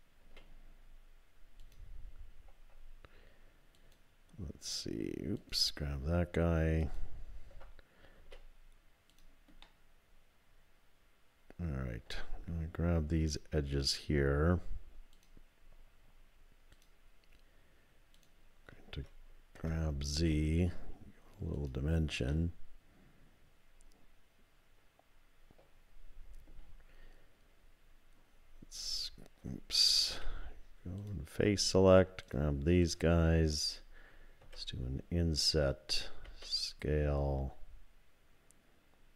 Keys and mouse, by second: 0.2 s, 3.8 alt+click, 5.4 alt+click, 6.9 alt+click, 8.2 s, 9.6-12.0 drag, 18.1 shift+click, 19.6 g, 22.3-26.5 middle drag, 28.8 shift+click, 30.1 3, 31.0 click, 31.7 shift+click, 32.2 shift+click, 34.4 i.